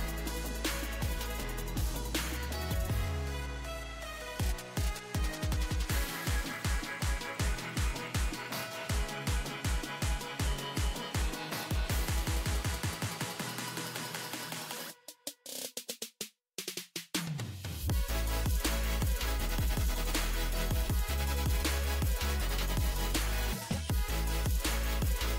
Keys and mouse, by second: 1.4 KP_1, 4.8 shift+s, 10.6 KP_1, 11.4 shift+a, 14.1 r, 16.2 s, 18.8 click, 19.8 KP_1, 20.2 z, 21.5 Tab, 23.0 s.